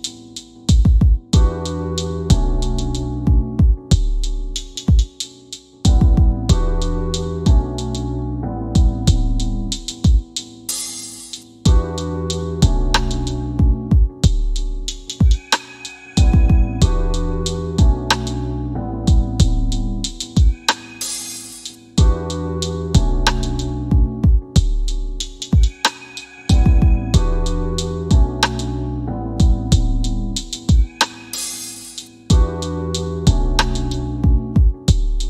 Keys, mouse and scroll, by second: 2.6 right click, 3.9 Escape, 4.2 click, 5.0 scroll up 1, 5.7 scroll down 1, 6.8 click, 7.3 alt+w, 7.9 ctrl+z, 8.6 alt+w, 9.3 click, 10.1 right click, 11.1 click, 11.9 scroll down 1, 12.5 click, 14.0 ctrl+click, 14.7 right click, 16.7 click, 17.3 alt+w, 17.8 w, 21.0 scroll up 1, 21.9 scroll down 1, 22.8 alt+w, 23.3 alt+w, 25.5 click, 30.6 scroll down 1, 32.2 click.